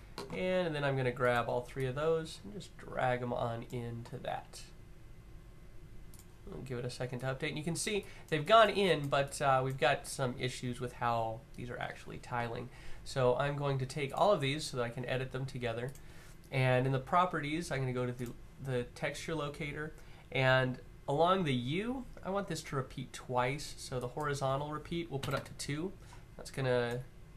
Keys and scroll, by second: 24.9 2, 25.0 Tab.